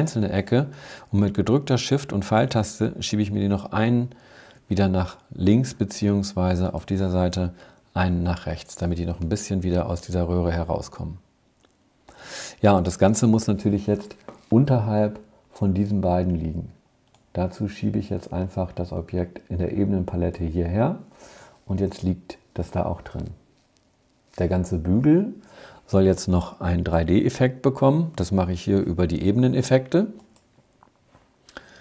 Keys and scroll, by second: 2.2 shift+Left, 7.7 shift+Right.